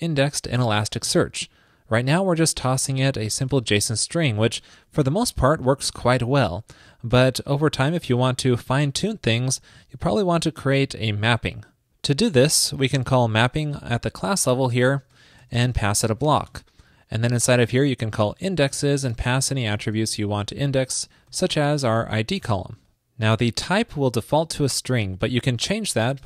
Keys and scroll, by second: 4.6 shift+super+Right.